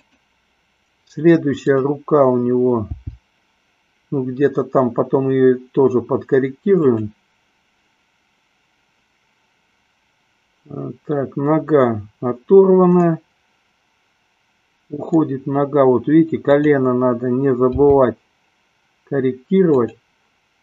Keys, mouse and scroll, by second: 1.7 click, 3.2 g, 13.4-15.4 middle drag, 16.8 click, 18.1 g.